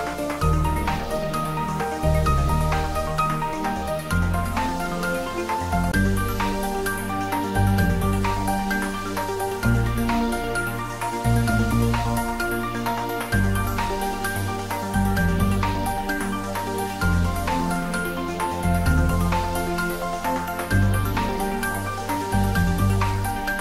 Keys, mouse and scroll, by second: 8.2-8.9 scroll down 1, 10.0 `, 10.3 3, 11.1-11.8 scroll down 1, 11.8-12.7 middle click, 11.9 scroll down 1, 12.8-14.0 scroll up 1, 14.0 click, 17.3 click, 23.3-23.6 scroll down 1.